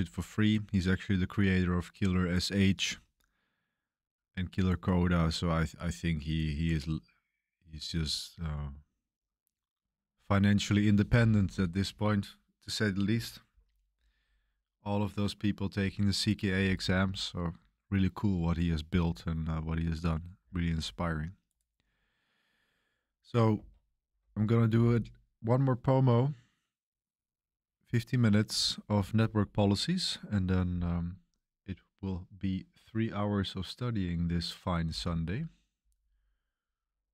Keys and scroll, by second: 23.5 super+3.